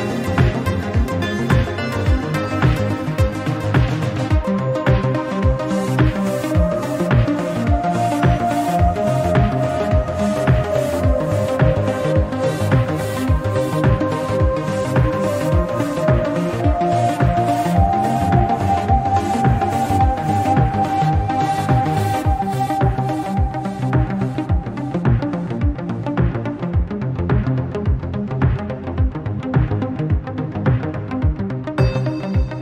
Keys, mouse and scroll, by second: 1.2 scroll down 4, 1.4-2.0 middle drag, 2.0-2.5 scroll up 7, 2.5-3.6 middle drag, 3.6 click, 3.9 click, 5.0-6.6 drag, 7.0-9.4 drag, 10.0-12.0 drag, 13.0-13.7 scroll down 4, 13.7-14.3 drag, 14.6 click, 15.7-17.6 right drag, 17.6 scroll up 1, 17.9-19.1 middle drag, 19.1 click, 20.1 click, 20.5-22.1 scroll down 1, 22.7-24.3 drag, 24.4-24.7 scroll up 4, 24.7-25.5 shift+middle drag, 25.5 drag, 26.1 click, 26.3-27.9 right drag, 29.0-29.8 scroll down 1, 29.8-30.3 drag, 30.7 click, 30.8-31.6 right drag, 31.6 click, 31.8 scroll down 2, 32.0-32.6 middle drag.